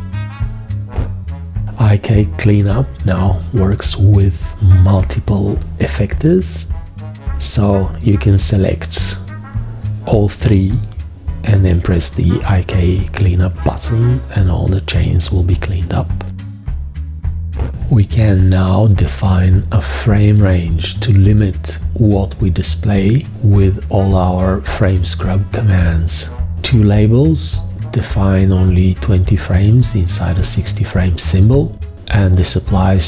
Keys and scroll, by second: 1.8 x, 2.4 g, 6.6 4, 10.6 v, 17.8 g, 20.6 v, 29.1 g, 31.2 v, 31.7 shift+,.